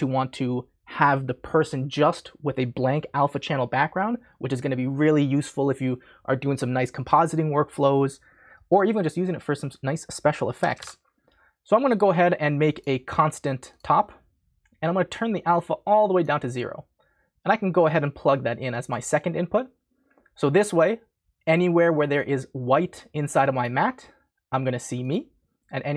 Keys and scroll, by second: 10.3-11.3 typing, 12.5-13.2 typing.